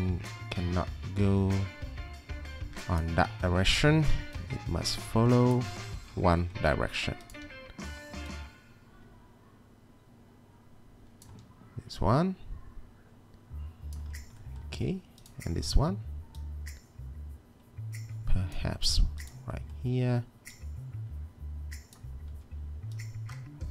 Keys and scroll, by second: 3.6 w, 7.5 e, 11.3 w, 22.3 e.